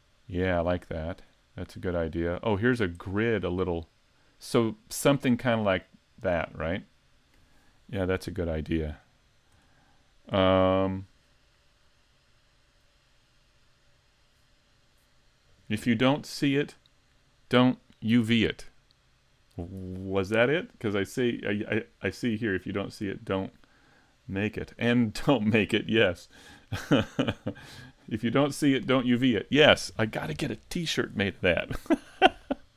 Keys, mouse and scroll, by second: 0.9-1.4 scroll down 4, 1.4 middle click, 2.6-3.1 scroll up 5, 3.1 middle click, 6.6-9.0 scroll down 4, 9.0-9.8 scroll up 1, 9.8 scroll up 1, 9.9 shift+middle click.